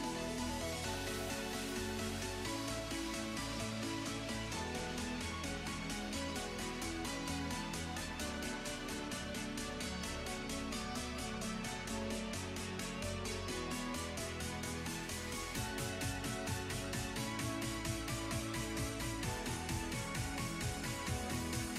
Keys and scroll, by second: 18.7 s.